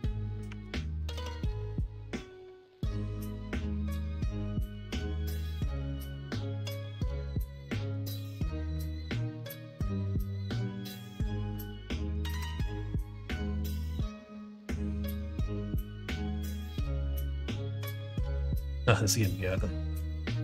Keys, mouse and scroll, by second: 0.4 Tab, 1.0 alt+z, 1.5-2.7 middle drag, 5.4 middle click, 5.7 Tab, 6.3 Tab, 7.9 Tab, 8.8 alt+z, 9.4 middle click, 10.0 middle click, 10.9 middle click, 12.2 shift+d, 13.7 p, 14.7 middle click, 15.0 Tab, 15.7 middle click, 16.8 middle click, 17.9 alt+z, 18.2 middle click, 19.0 middle click.